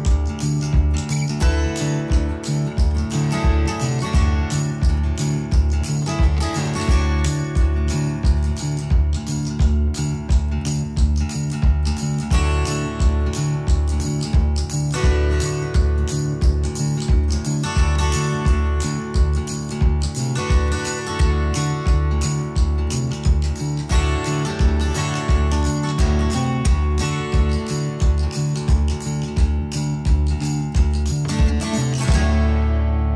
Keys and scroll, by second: 0.7 space, 7.2 ctrl+z, 7.6 space, 10.4 ctrl+g, 13.3 space, 13.6 Escape, 13.9 Escape, 21.0-24.1 typing, 31.8 space.